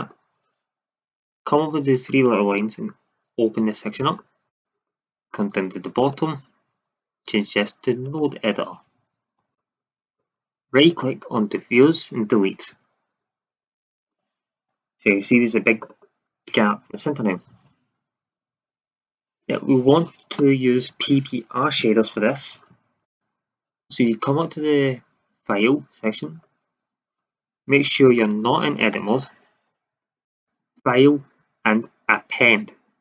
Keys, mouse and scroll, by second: 2.2-2.8 drag, 2.9-3.6 middle drag, 3.6-4.1 drag, 6.0-7.9 drag, 9.3 n, 10.9 click, 11.8 Delete, 13.9 shift+z, 28.1 shift+z, 29.0 Tab.